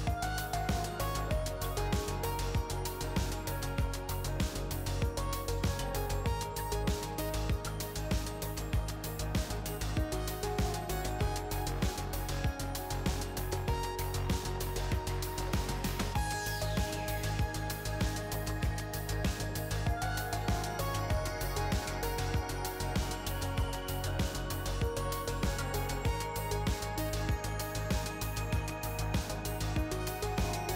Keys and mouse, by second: 0.7 middle click, 1.9-3.0 middle drag, 12.3-16.6 middle drag, 16.6-17.8 drag, 22.8-24.1 drag, 24.5-25.9 drag, 26.8-28.0 middle drag, 28.0-29.3 middle drag, 29.3-30.6 drag.